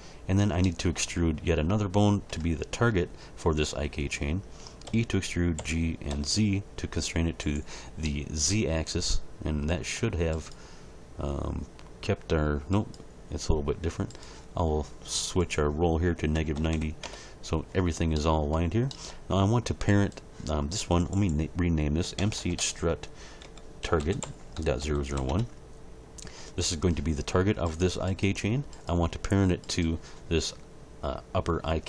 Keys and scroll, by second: 4.8 e, 5.5 g, 6.1 z, 16.3 -, 16.5 9, 16.7 0, 17.0 Return, 22.2 BackSpace, 23.4-25.1 typing, 25.3 Return.